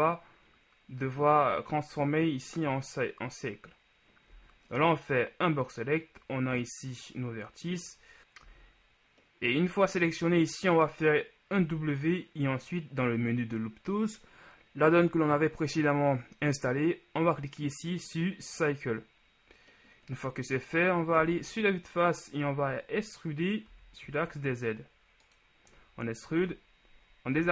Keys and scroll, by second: 4.6 z, 8.2 z, 11.8 w, 21.4 KP_1, 23.9 e, 24.2 z.